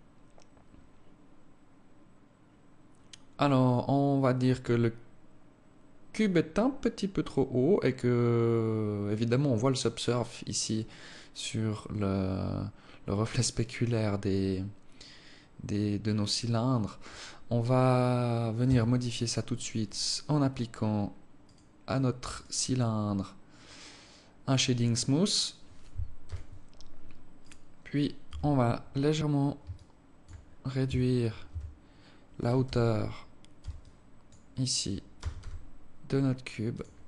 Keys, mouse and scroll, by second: 18.3 Escape, 18.8 scroll up 3, 19.5 right click, 21.2 right click, 21.5 right click, 22.0 right click, 23.0-23.6 scroll down 1, 24.4 click, 25.9 t, 27.0 right click, 27.9 KP_1, 28.8 scroll up 4, 29.5 alt+shift+click, 30.2 scroll up 2, 30.6 Tab, 31.2 a, 32.4 z, 33.4 b, 34.9 g, 36.8 Tab.